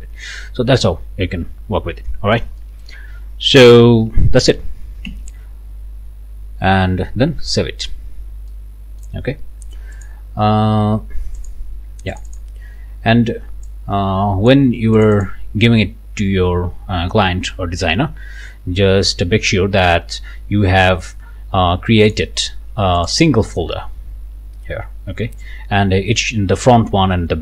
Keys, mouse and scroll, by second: 1.6-1.9 scroll down 1, 2.1 scroll up 1, 2.6 click, 5.1 ctrl+s, 8.5 click, 10.0 click, 11.4 click, 12.1 click, 13.7-14.7 drag, 15.0 click, 22.1 click, 23.0 click.